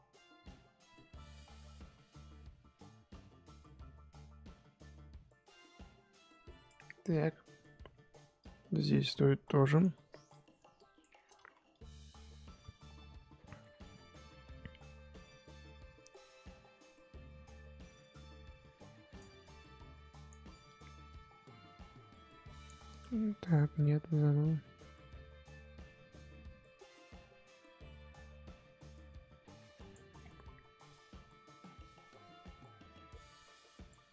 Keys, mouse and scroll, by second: 11.4 ctrl+z, 11.7-22.9 drag, 22.9 ctrl+z, 23.7-34.1 drag.